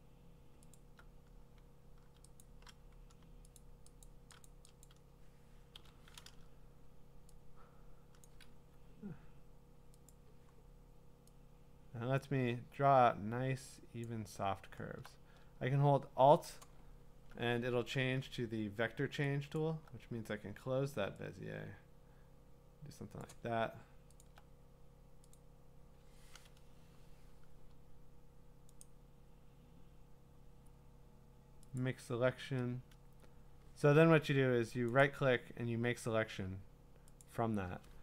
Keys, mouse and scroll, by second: 0.7 alt+click, 2.4 shift+click, 3.6 ctrl+click, 4.0 alt+click, 8.3 click, 8.3 p, 8.5 Escape, 10.1 click, 14.0 click, 19.6 alt+click, 23.2 click, 23.8 click, 24.2 alt+click, 25.4 click, 28.8 right click, 31.8 click, 34.1 Escape, 35.0 right click, 37.2 click.